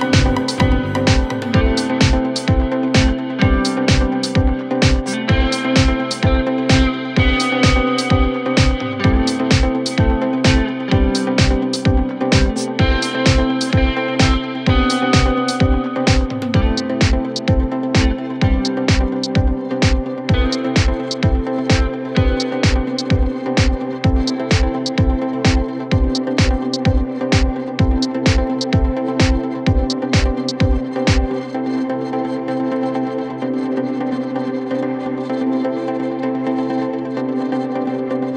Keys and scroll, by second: 7.6 Delete, 10.7 F3, 11.0 Escape, 33.3 Delete.